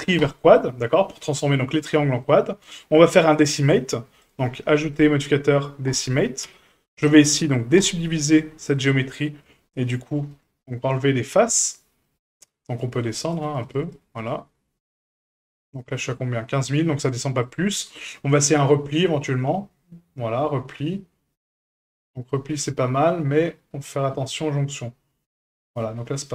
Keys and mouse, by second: 2.2 middle click, 3.7 Tab, 4.9-6.0 drag, 6.5 Tab, 7.8 click, 9.4 click, 10.3 click, 11.4 click, 12.0 click, 12.7-14.6 drag, 14.9 click, 17.4-25.7 drag, 26.1-26.3 middle drag.